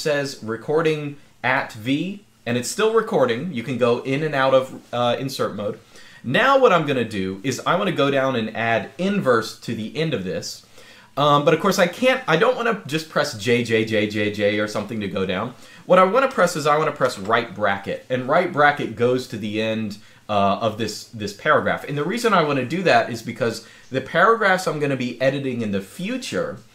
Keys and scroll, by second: 16.8 }.